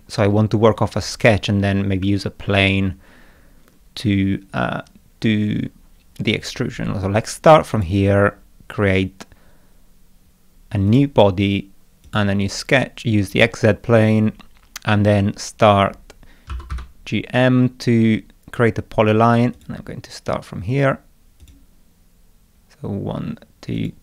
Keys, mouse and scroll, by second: 7.7 click, 10.9 click, 12.1 click, 13.3 click, 16.3-17.2 typing, 19.5 click, 21.4 click, 23.8 click.